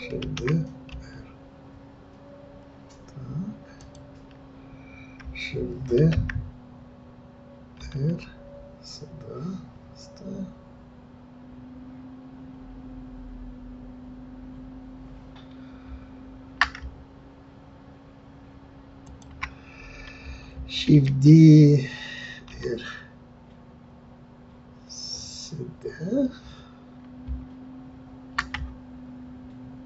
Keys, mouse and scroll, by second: 0.2 shift+d, 6.0 shift+d.